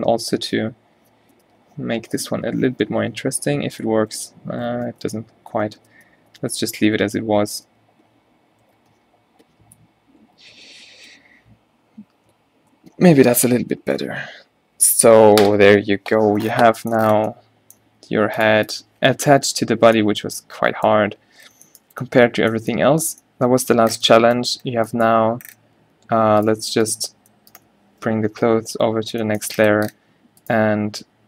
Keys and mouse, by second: 19.4-20.4 drag, 19.4 a, 25.2 2, 25.9 1, 28.5 m.